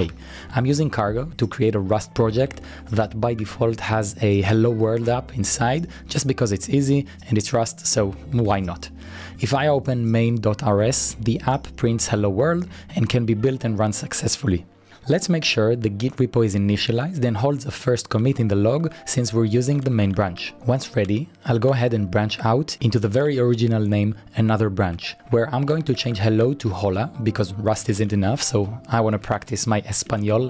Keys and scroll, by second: 0.0-0.3 typing, 0.3 Return, 2.1-3.7 typing, 7.6-9.9 typing, 14.4 Return, 17.4 typing, 18.5-22.8 typing, 25.4 Return, 25.6-30.4 typing.